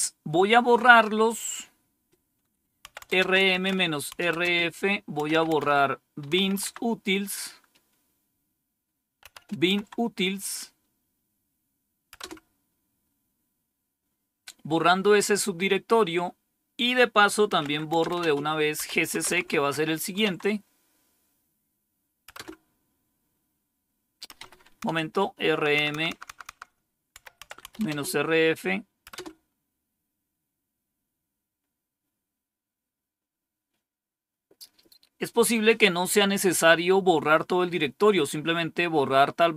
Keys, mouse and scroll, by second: 2.6-6.3 typing, 6.5 Tab, 9.2-9.6 typing, 12.1 typing, 17.5-19.8 typing, 20.1 Tab, 22.2 Return, 24.2 Up, 24.8 Left, 25.4 Left, 25.9 Left, 26.4 Left, 26.9-28.1 typing, 29.0 Return.